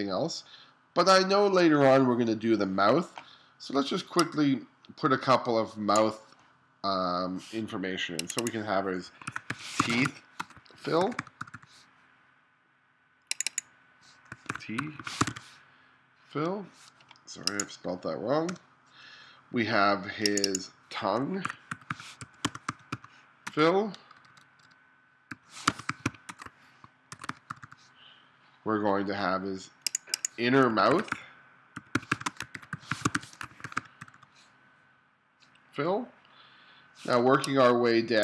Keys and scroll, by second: 9.3-11.4 typing, 14.5-15.3 typing, 18.5 BackSpace, 19.0 BackSpace, 21.5-24.0 typing, 25.4-27.5 typing, 30.9-34.0 typing, 37.2 space.